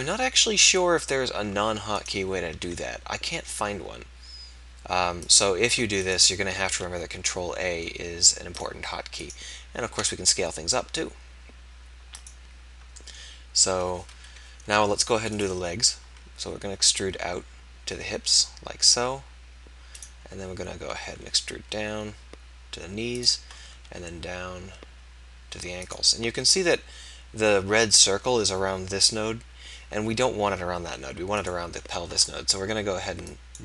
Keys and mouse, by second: 2.6 ctrl+a, 6.7 ctrl+a, 9.9 ctrl+a, 14.1 KP_1, 16.1 e, 21.0 e, 23.8 e, 33.2 click.